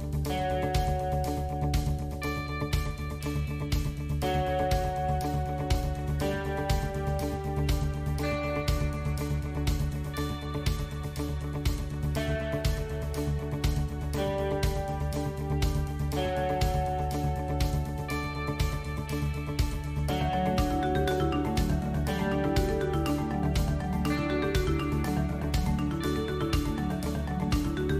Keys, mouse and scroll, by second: 0.0 alt+click, 1.1 click, 2.4 click, 3.1 alt+click, 4.9 click, 8.4 alt+click, 9.1 click, 10.7 alt+click, 11.4 click, 13.6 alt+click, 14.1 click, 15.5 alt+click, 16.2 click, 18.8 click, 20.1 alt+click, 20.8 click, 24.2 KP_1, 25.0 middle click, 25.6 click, 26.5 3, 26.8 click, 27.5 shift+click.